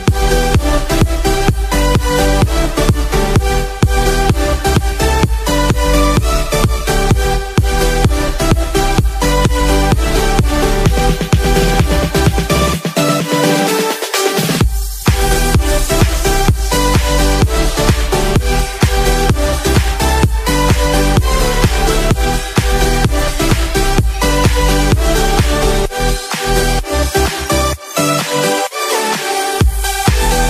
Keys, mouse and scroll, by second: 1.0-10.5 drag, 15.4 click, 16.5 right drag, 18.2 click, 18.9 right click, 19.9 click.